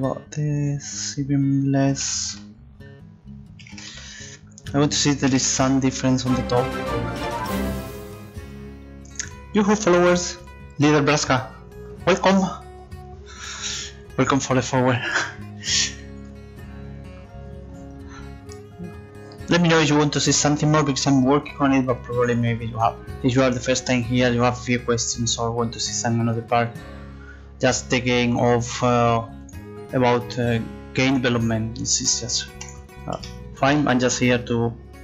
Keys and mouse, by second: 3.6 KP_6, 3.7 KP_0, 3.9 Return, 27.0-30.1 drag, 27.0-30.1 right drag, 30.1 middle click, 30.3-32.3 right drag, 33.7 click, 34.1 middle click.